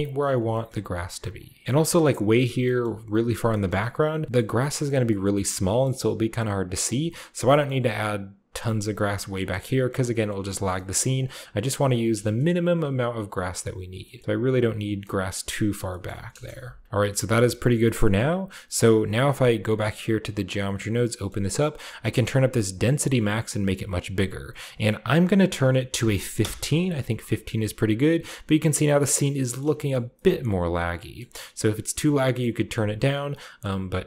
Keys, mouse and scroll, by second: 0.2 shift+click, 0.4-1.6 drag, 1.6-2.4 scroll down 1, 1.6 KP_0, 1.6 f, 2.4-3.1 scroll down 1, 2.8 middle click, 3.6-5.9 middle drag, 4.1 scroll down 1, 4.2-4.7 scroll up 1, 4.7 click, 5.3-5.9 scroll up 2, 6.1 middle click, 6.4-8.5 middle drag, 6.9-8.1 scroll down 1, 8.1-8.9 scroll down 1, 8.6 middle click, 9.2-9.7 shift+scroll up 1, 9.7 shift+click, 10.1-10.8 scroll up 1, 10.8-13.6 middle drag, 12.1 KP_0, 13.6 scroll up 1, 14.1 shift+middle click, 14.9 shift+click, 14.9 shift+scroll up 1, 14.9 shift+middle click, 15.1 click, 15.6 middle click, 15.7-16.8 scroll down 1, 16.2 KP_0, 16.4 middle click, 16.8 click, 16.8 f, 17.0 shift+middle click, 17.0-17.8 scroll down 3, 20.0 click, 20.7-21.9 drag, 21.0-23.5 middle drag, 23.5-24.6 drag, 24.7-26.3 drag, 25.5 1, 25.9 5, 26.3 Return, 27.7-28.1 scroll down 1, 28.1-29.7 middle drag, 29.8 shift+middle click, 29.9-30.6 shift+scroll up 1, 30.6-32.0 shift+scroll up 1, 31.1 middle click, 32.0-33.2 scroll up 1, 32.3 middle click, 33.5 middle click, 33.6-34.0 scroll up 1.